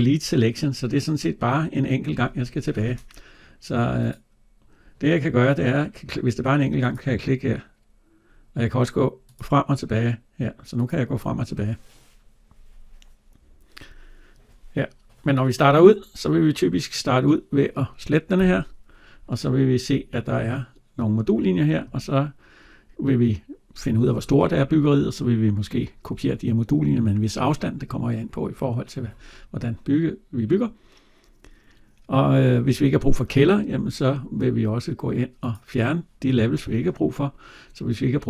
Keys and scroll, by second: 18.2 Delete.